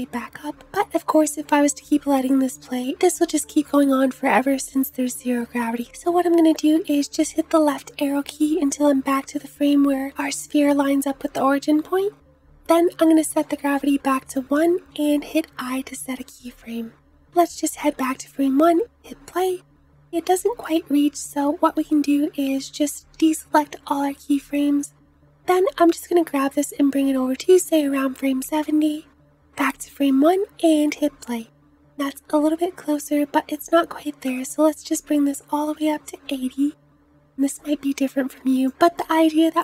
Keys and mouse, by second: 0.8 space, 1.7 space, 5.5-6.1 Left, 6.5 Left, 6.6 Left, 6.7 Left, 7.2 Left, 7.4 Left, 7.7 Left, 8.0 Left, 15.0 i, 18.1 space, 20.7 space, 23.5-39.6 drag, 25.7-39.6 middle drag, 25.7-39.6 right drag, 29.9 space.